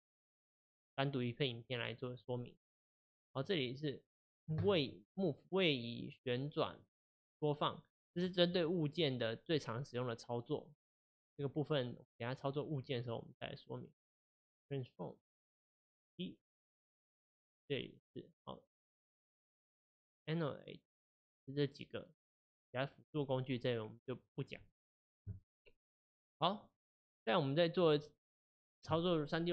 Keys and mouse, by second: 15.2 click, 16.4 middle click, 17.4-20.4 drag, 23.9-26.8 drag, 26.8-29.5 middle drag.